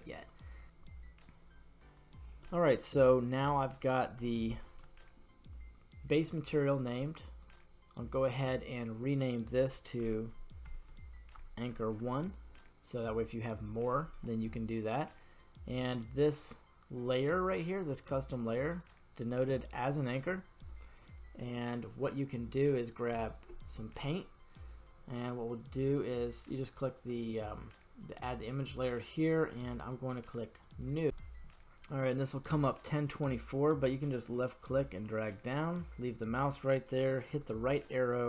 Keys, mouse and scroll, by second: 0.7 click, 3.1-3.9 middle drag, 4.3 shift+middle click, 5.1-6.1 scroll up 1, 6.8 click, 7.5-12.1 drag, 12.3 Return, 15.3 click, 18.7 click, 23.3 click, 24.3-24.9 scroll down 2, 24.9-26.3 scroll down 1, 30.8-38.2 drag.